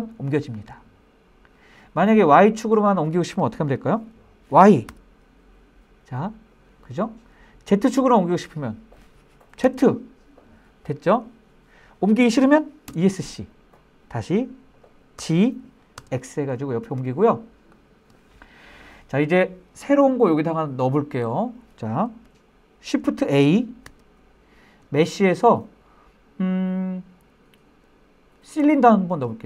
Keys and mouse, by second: 4.3 y, 9.1 z, 12.3 Escape, 14.7 g, 15.4 x, 17.1 click, 23.3 shift+a.